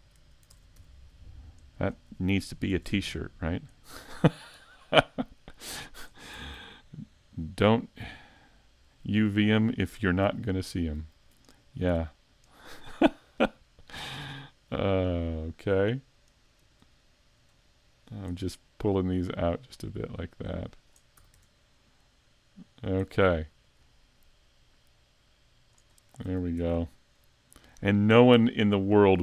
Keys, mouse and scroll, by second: 0.5 ctrl+Tab, 1.8 right click, 2.6 shift+right click, 3.0-3.7 scroll up 3, 4.4 click, 6.4 a, 6.5 Tab, 6.7-7.3 scroll down 1, 7.3 middle click, 7.3 scroll down 4, 10.8 Tab, 11.7 right click, 12.5 shift+right click, 13.0 middle click, 15.4 scroll up 1, 16.4 shift+right click, 16.9 middle click, 17.9 shift+right click, 19.1 click, 21.2 a, 21.4 Tab, 21.8 middle click, 23.6 click, 26.0-26.6 scroll down 3, 26.3 a, 26.6 Tab, 27.1 middle click, 27.7-28.3 scroll down 3, 28.3 shift+c, 28.9 scroll down 1.